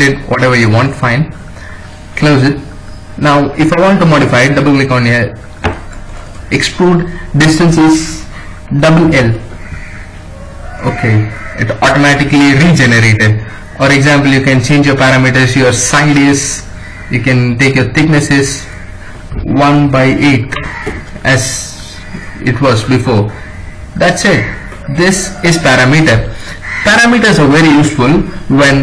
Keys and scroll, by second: 8.6 shift+l, 11.4 Escape, 19.1-20.3 typing, 23.1 Escape.